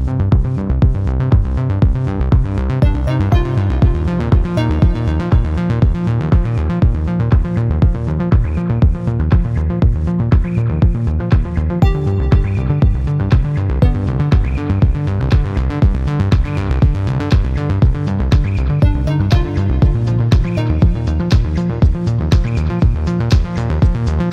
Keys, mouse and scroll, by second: 0.0 click, 0.6 0, 1.1 click, 2.6-3.0 scroll up 2, 4.4 click, 6.1-7.6 drag, 8.7 click, 10.4 click, 11.4 click, 12.0 click, 13.3-13.7 scroll down 2, 13.9 scroll up 2, 15.0-16.9 drag, 18.0 click, 19.1-21.4 drag, 21.7-22.2 scroll down 1, 22.5 scroll up 1, 23.6 click.